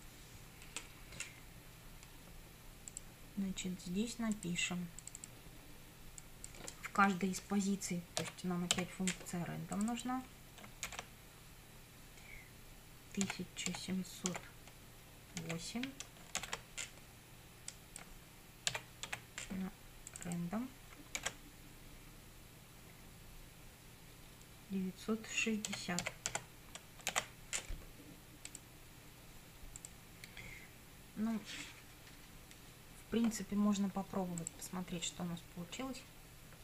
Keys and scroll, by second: 8.3 r, 8.8 a, 10.9 shift+9, 13.3 1, 13.7 7, 14.3 0, 16.4 shift+0, 18.8 r, 19.2 a, 21.2 shift+9, 25.5-27.2 typing.